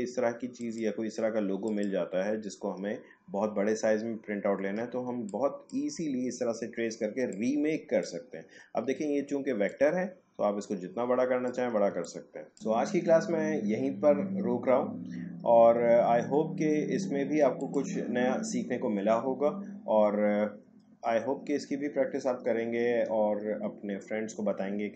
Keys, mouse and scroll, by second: 0.6 click, 3.1-4.1 alt+scroll up 1, 4.1 alt+scroll down 1, 5.0 space, 5.3 click, 5.6 space, 7.3-9.6 drag, 11.9 space, 12.0 click, 12.4 space, 12.6 click, 17.6 click, 20.2-20.7 alt+scroll up 1, 21.0-22.5 alt+scroll down 1, 22.5-24.2 alt+scroll up 1.